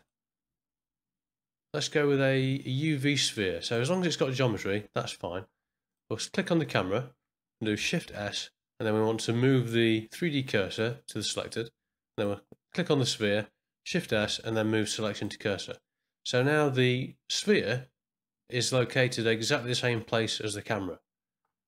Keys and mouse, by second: 6.6 click, 8.0 shift+s, 14.0 shift+s.